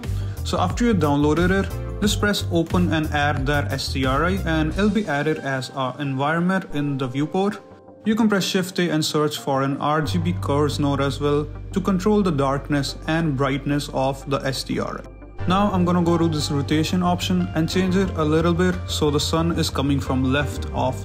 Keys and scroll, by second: 3.6 alt+Tab, 4.5 a, 4.8 shift+z, 5.2 a, 7.5 shift+a, 16.5 a.